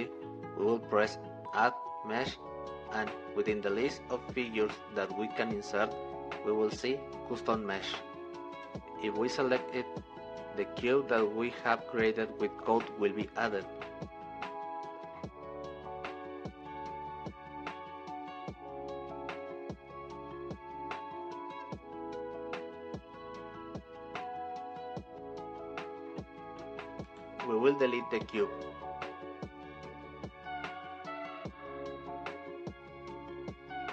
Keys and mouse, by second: 13.8-17.9 drag, 20.5-24.8 middle drag, 25.2 click, 28.5 x, 30.8-32.1 drag.